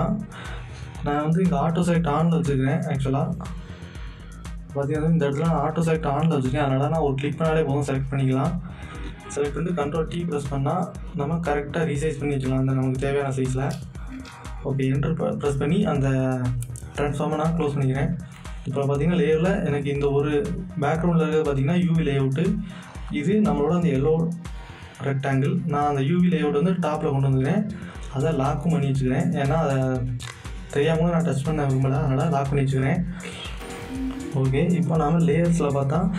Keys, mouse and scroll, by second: 2.8 click, 5.6 click, 9.4 ctrl+t, 11.4-13.7 drag, 13.7 Return, 17.9 Return, 18.0 click, 19.6 scroll down 1, 20.8-28.5 drag, 33.5 click.